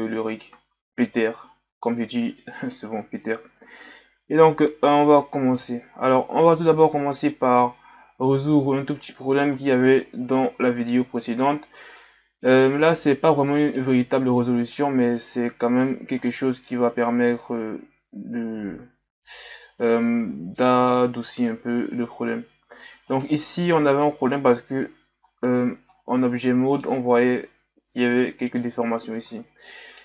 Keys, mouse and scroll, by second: 0.3-0.7 shift+scroll down 4, 5.8-6.6 scroll up 6, 6.6-8.5 middle drag, 8.5-9.0 scroll up 7, 9.0-9.7 middle drag, 9.7-10.8 scroll up 6, 10.8-11.5 middle drag, 11.5-12.0 shift+scroll up 4, 12.0-12.8 middle drag, 12.8-13.3 scroll up 2, 13.3-14.1 middle drag, 14.1 scroll up 2, 14.6 right click, 14.9-15.2 scroll down 2, 15.6 Tab, 16.3 middle click, 17.0 scroll up 1, 17.9-20.7 scroll up 1, 23.1 right click, 23.9 right click, 24.4 Tab, 25.3-25.9 scroll down 1, 25.9-28.9 middle drag, 29.2 Tab, 29.6 middle click.